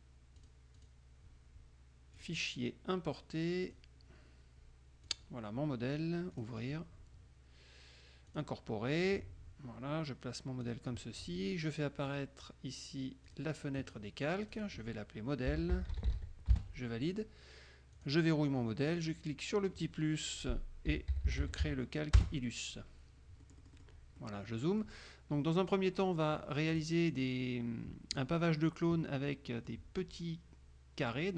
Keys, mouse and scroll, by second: 0.5 click, 0.9 click, 2.3 click, 3.8 click, 5.2 click, 6.5 click, 8.5 click, 9.2-10.9 drag, 12.2 click, 13.4 click, 14.6 click, 15.4-16.6 typing, 16.7 Return, 18.1 click, 19.0 click, 20.8-22.2 typing, 22.3 Return, 23.5 click, 24.3 click, 26.6 click, 29.5 click.